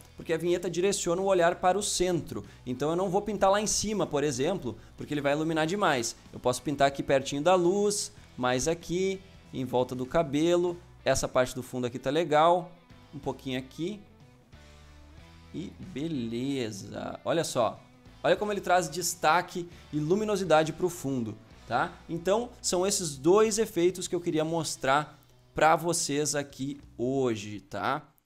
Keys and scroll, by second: 5.5 ctrl+z.